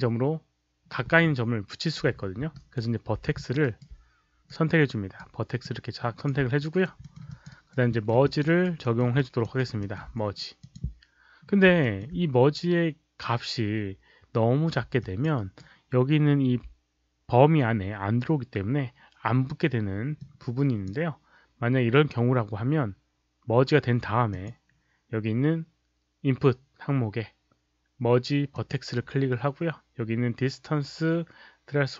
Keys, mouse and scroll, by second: 2.4 alt+right click, 3.3 alt+click, 3.5 alt+right click, 4.4-5.1 right drag, 5.5-6.2 drag, 6.5 alt+right drag, 6.9 alt+middle click, 7.2 alt+click, 7.4 alt+right click, 7.8 alt+middle click, 8.2 alt+click, 8.4 alt+right click, 8.7 alt+middle click, 9.1 alt+click, 9.5 alt+right click, 9.7 alt+middle click, 10.5 click, 11.7 alt+middle click, 14.9 alt+click, 15.3 alt+right click, 20.1-20.8 drag, 24.2 click, 28.4 click.